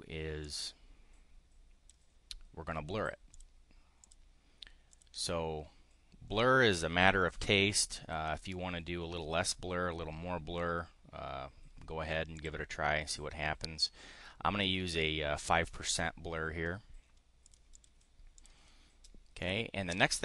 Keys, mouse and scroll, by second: 0.3-1.9 drag, 3.3 click, 4.0 click, 4.9 click, 12.3 click, 17.5-17.8 drag, 18.2 click.